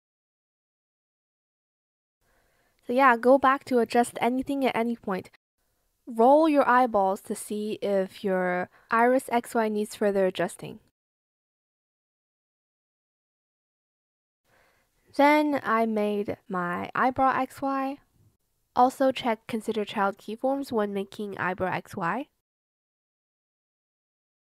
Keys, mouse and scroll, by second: 0.4 shift+click, 1.1 shift+click, 2.1 shift+click, 5.4 shift+click, 5.7 shift+click, 6.1 shift+click, 10.2 ctrl+z, 12.0 click, 17.9 click, 19.4-21.5 typing.